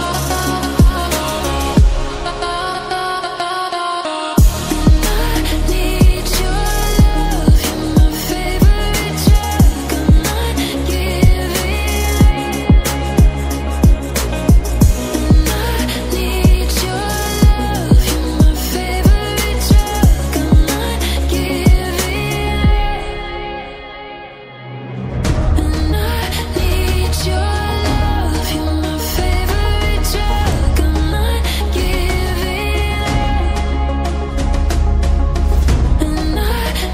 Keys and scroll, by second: 1.8 ctrl++, 1.9 ctrl++, 3.8 ctrl+z, 6.2 ctrl+e, 10.4 ctrl+z, 11.4 ctrl+z, 12.3 ctrl+z, 21.6 ctrl+z, 22.3 typing, 23.0 ctrl+z, 24.4 ctrl+z, 32.7 ctrl+g.